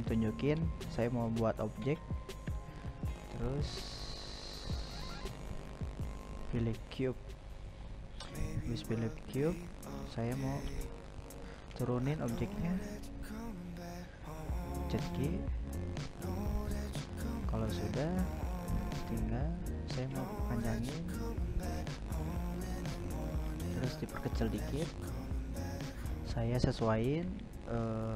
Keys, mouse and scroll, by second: 3.8-4.9 middle drag, 4.9 click, 5.9 drag, 6.4 click, 6.8 g, 7.8 g, 9.8-11.2 middle drag, 11.2 g, 14.0-16.2 middle drag, 16.2 s, 18.2-19.8 middle drag, 19.8 s, 22.3-23.3 middle drag, 23.3 s, 24.9 s, 27.6-28.1 middle drag.